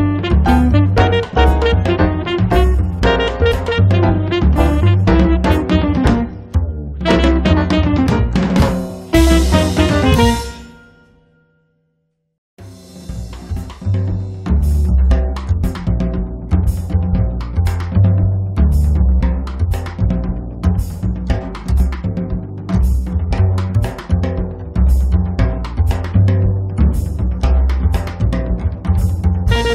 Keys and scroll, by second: 2.7 space, 10.8 m, 12.3 Up, 15.1 space, 18.9 m, 20.0 Up, 22.5-24.5 typing, 27.7 space, 29.2 Delete.